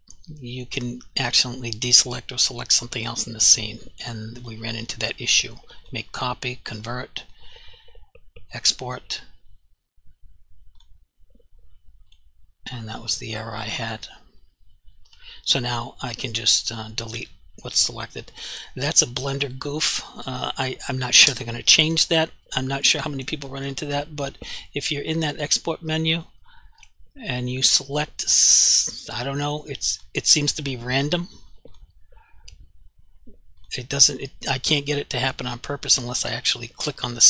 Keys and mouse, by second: 4.5 click, 16.8 click, 17.2 Delete, 26.2 click.